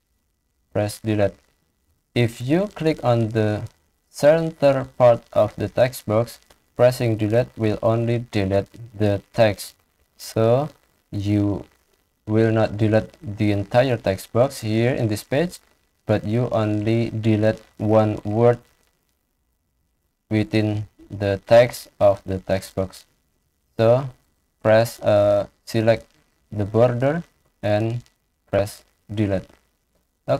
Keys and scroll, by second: 0.6 Delete, 1.7 ctrl+z, 7.2 Delete, 9.6 ctrl+z, 18.1 Delete, 20.1 ctrl+z, 28.3 Delete.